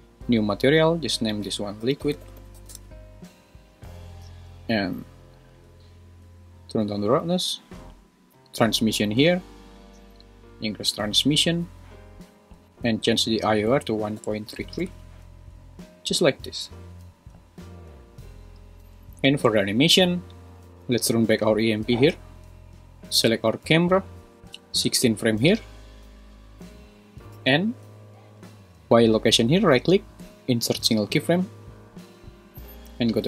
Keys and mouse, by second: 0.2 click, 1.4-2.8 drag, 5.5-6.8 drag, 8.6 click, 9.8 click, 13.5-14.8 drag, 14.6 3, 18.8 super+s, 24.8 click, 27.3 n, 29.9-31.3 right drag, 32.9 shift+Left.